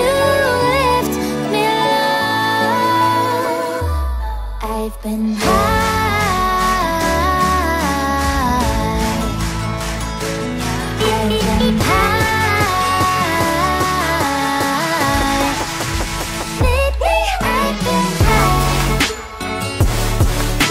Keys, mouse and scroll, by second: 0.5 alt+scroll down 1, 6.1-6.6 alt+scroll down 3, 7.2 ctrl+z, 9.5 alt+scroll down 1, 9.7 alt+scroll up 1, 10.0 alt+click, 10.7 space, 11.0 alt+click, 11.1 space, 11.4 alt+scroll down 1, 11.9 space, 12.1 alt+scroll down 1, 12.2 alt+scroll up 1, 12.5 alt+click, 13.1 space, 13.7 alt+scroll up 1, 14.3 alt+click, 14.5 alt+click, 14.7 alt+scroll down 5, 15.5 alt+click, 16.0 alt+click, 16.2 alt+scroll up 3, 16.4 alt+click, 16.5 alt+click, 16.9 alt+click, 17.3 alt+click, 17.6 double click, 18.2 alt+click, 18.8 alt+click, 19.0 alt+click, 19.3 alt+click, 19.6 alt+click, 19.8 alt+scroll down 1, 20.4 alt+click.